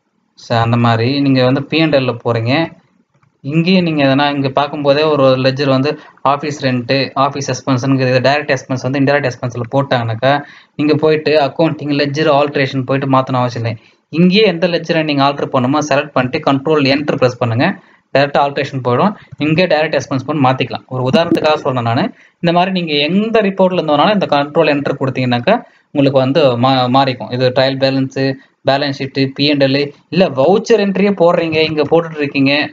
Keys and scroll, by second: 0.4 Escape, 1.3 Down, 2.0 Return, 3.2 alt+F1, 3.6 Down, 3.8 Down, 4.0 Down, 4.1 Down, 4.3 Down, 4.5 Down, 4.7 Down, 4.8 Down, 5.0 Down, 5.1 Down, 7.1 Up, 14.7 Down, 16.9 ctrl+Return, 19.3 Return, 19.5 Return, 19.9 Return, 21.1 Escape, 21.4 Escape, 23.7 Escape, 30.5-32.7 typing.